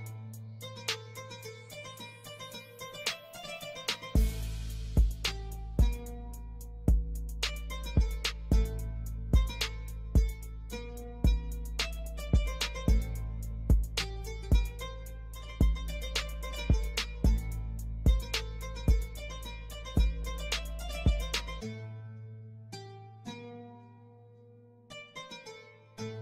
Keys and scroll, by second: 3.9 F3, 4.3 F2, 7.4 ctrl+g, 12.2 F3, 12.8 F2, 23.1 ctrl+r.